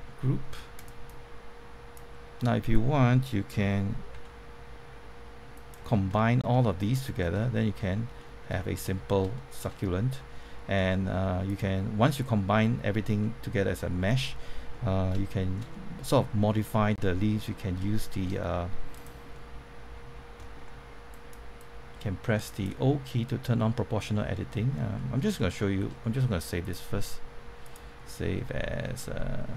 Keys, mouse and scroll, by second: 0.7 click, 2.3 middle click, 3.5-4.1 typing, 5.5 click, 5.9 scroll down 1, 6.1 middle click, 7.4 shift+middle click, 8.9-9.3 scroll up 2, 9.8-10.1 scroll up 1, 10.1 middle click, 11.4 click, 12.5 middle click, 15.2 shift+middle click, 18.0 shift+middle click, 18.9 click, 19.3 middle click, 21.0-23.0 drag, 24.9 middle click, 25.3 shift+middle click, 26.6 click.